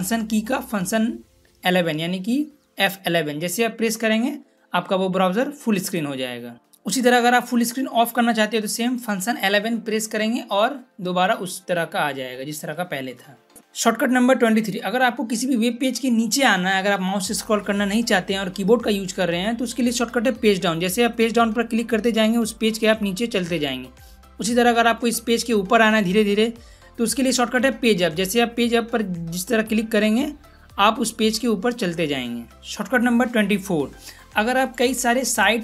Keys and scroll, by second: 3.0 F11, 9.4 F11, 20.3 Page_Down, 27.7 Page_Up.